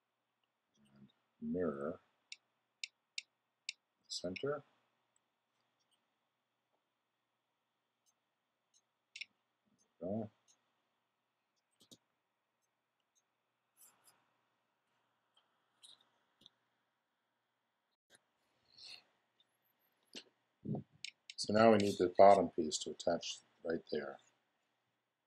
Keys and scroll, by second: 11.8 x.